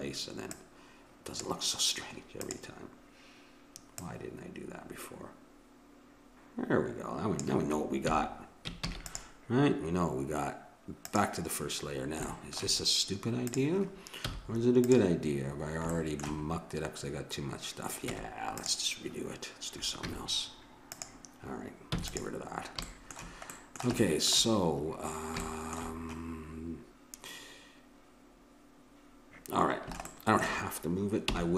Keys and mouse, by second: 0.6-2.3 drag, 2.4-5.7 drag, 8.1 a, 8.8 ctrl+s, 11.1 click, 12.3 click, 13.9 click, 14.2 z, 18.0 Tab, 20.0 z, 21.9 x, 31.2 n.